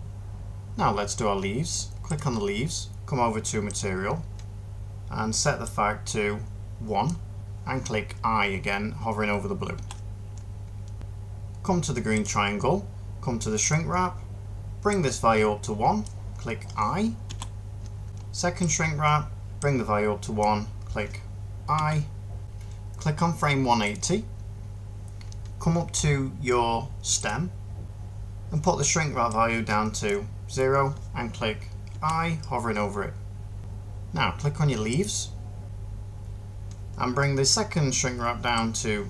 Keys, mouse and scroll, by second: 0.3 ctrl+z, 9.6 i, 17.1-22.2 middle drag, 31.8 i.